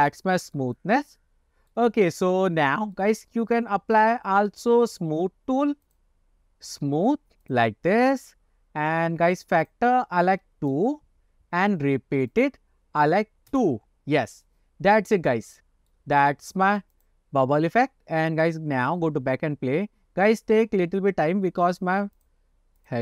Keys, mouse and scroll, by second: 0.4 shift+middle drag, 0.9-1.8 middle drag, 2.1-2.4 shift+middle drag, 3.1 shift+middle drag, 3.5 scroll down 1, 4.2-4.6 shift+middle drag, 6.0-8.2 drag, 9.0-9.7 scroll down 2, 9.7-11.3 drag, 12.5-14.2 drag, 15.0-16.0 middle drag, 17.0-17.6 drag, 18.3 click, 22.6 click.